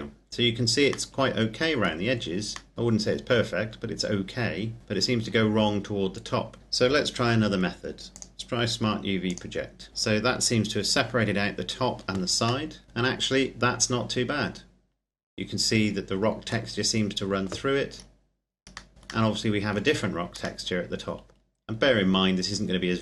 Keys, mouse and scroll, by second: 0.9 middle click, 5.0 Tab, 6.6 u, 7.9 click, 9.8-10.2 scroll down 1, 12.4 middle click, 17.8-18.8 scroll up 1, 18.8 middle click, 18.9 scroll down 1, 19.0 middle click.